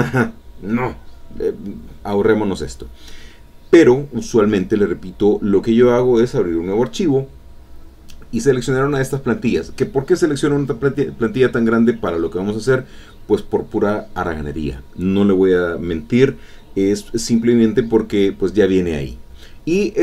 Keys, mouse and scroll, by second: 0.0-1.2 drag, 2.3 click, 6.2 click, 7.5 click, 8.8 click, 11.5-12.6 ctrl+middle drag, 11.5-12.6 ctrl+scroll up 2, 13.4 ctrl+click.